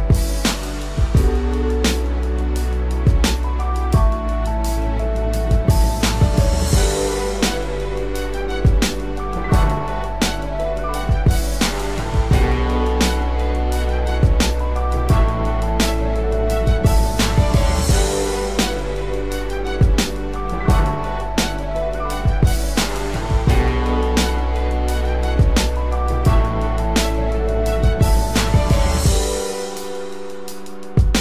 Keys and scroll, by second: 1.3 ctrl+=, 1.6 ctrl+space, 2.2 ctrl+=, 11.1 ctrl+-, 11.4 ctrl+0, 15.5 ctrl+=, 21.7 ctrl+-, 22.9 ctrl+-.